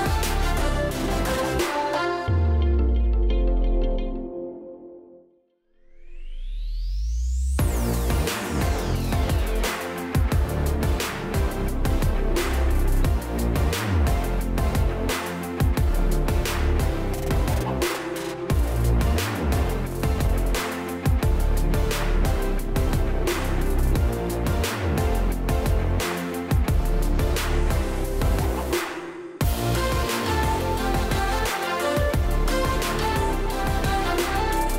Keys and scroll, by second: 9.5 Escape, 12.7 Escape, 13.6-14.5 ctrl+space, 15.1-15.5 space.